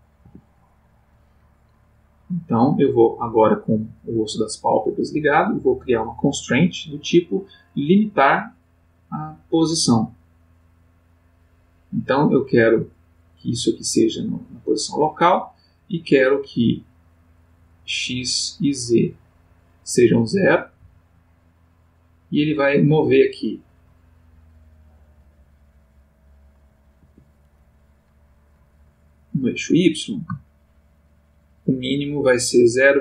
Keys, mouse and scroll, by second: 0.2 Escape, 2.7 click, 6.0 click, 10.8 click, 13.1 click, 14.3 click, 17.9 click, 18.4 click, 18.8 click, 19.4 click, 20.8 g, 27.0 Escape, 29.6-33.0 drag.